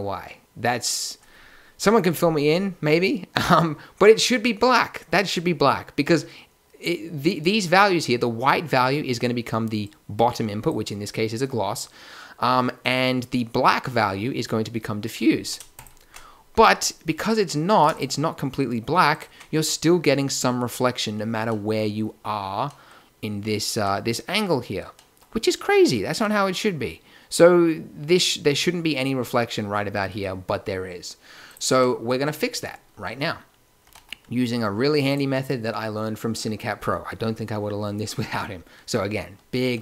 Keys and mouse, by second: 3.4 middle click, 16.2-17.3 drag, 19.9-21.5 drag, 22.1-24.0 middle drag, 24.4 middle click, 24.9 middle drag, 26.4-28.4 middle drag, 31.5-33.1 drag, 33.8 g, 39.6 shift+d.